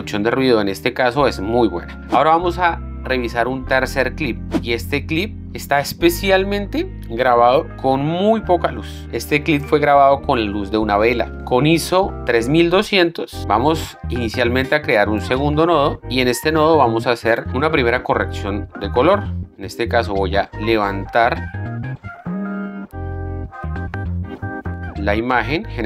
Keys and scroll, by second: 15.7 alt+s.